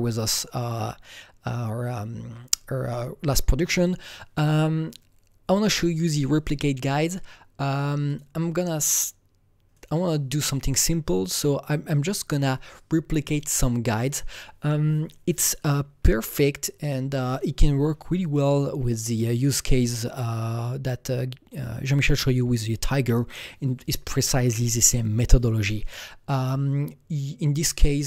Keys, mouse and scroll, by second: 8.0-9.7 drag, 9.7 click, 10.8 click, 11.2-18.2 drag.